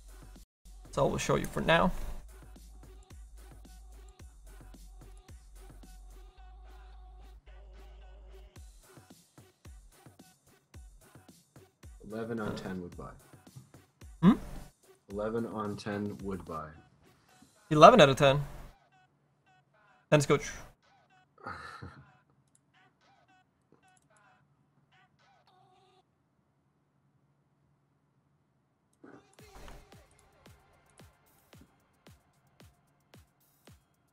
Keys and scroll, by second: 7.7 ctrl+z, 10.0 ctrl+z.